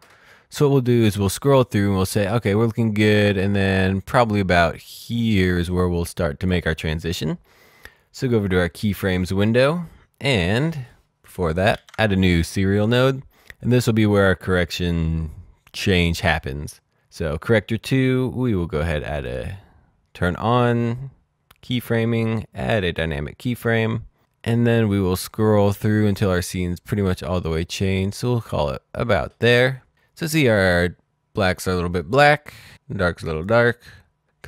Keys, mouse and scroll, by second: 8.6 click, 11.7 alt+s, 12.6 click, 18.7 click, 21.6 right click, 22.4 click, 26.1 click, 33.1 click.